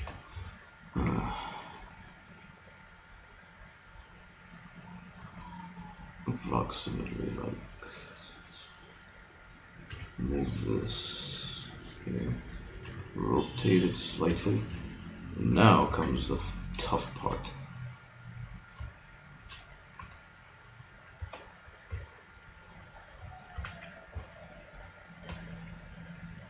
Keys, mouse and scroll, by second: 1.0 s, 9.6 click, 10.0 g, 11.4 click, 12.0 click, 12.9 r, 13.9 click, 14.6-15.9 middle drag, 15.9 ctrl+Tab, 17.6-19.7 middle drag, 19.7-20.8 right drag, 20.0 g, 22.0 b, 24.1 a, 24.2 b, 25.3 g.